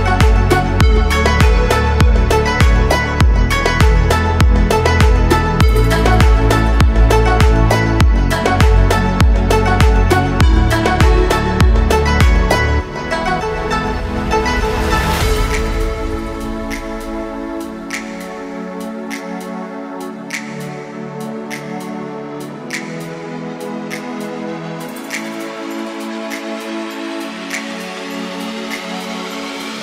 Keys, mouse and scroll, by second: 3.8 click, 4.4 click, 5.1 click, 5.7 click, 8.2 shift+a, 12.2-14.8 drag, 15.1-16.7 drag, 16.2 KP_0, 17.6 KP_1, 18.9-22.5 drag, 23.2-23.6 scroll down 1, 23.6-24.9 middle drag, 24.9 Tab, 26.0 3, 26.2 click, 27.0-29.8 right drag.